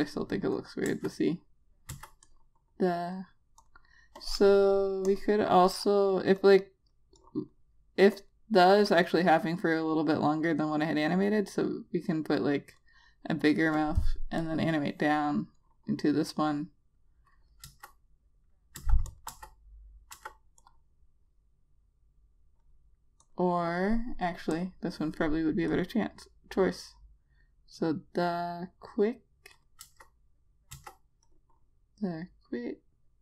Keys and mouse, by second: 1.4 Return, 2.4 Return, 2.8 click, 18.2 click, 19.3 Return, 19.6 click, 19.8 Return, 20.7 Return, 21.2 click, 31.3 Return, 31.8 click.